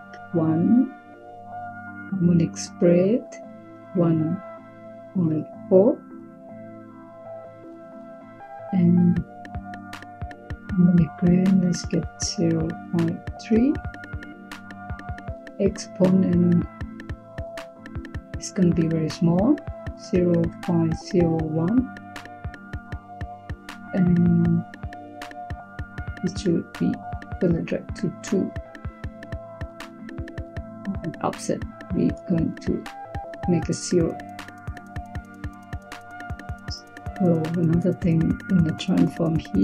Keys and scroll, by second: 3.6 1, 4.8-5.3 typing, 12.0-13.2 typing, 19.6-21.2 typing, 26.6-27.3 typing.